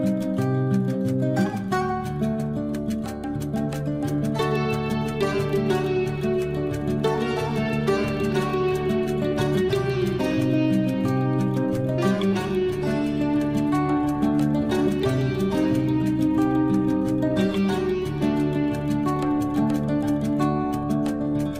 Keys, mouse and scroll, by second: 1.4 shift+click, 3.6 shift+9, 3.8 shift+Return, 4.9 shift+middle click, 5.9 shift+scroll up 1, 7.4 shift+click, 8.0-8.5 shift+scroll down 1, 8.5 shift+Escape, 9.2 space, 9.6-10.2 shift+scroll up 1, 10.2 shift+space, 10.6 click, 11.8 shift+t.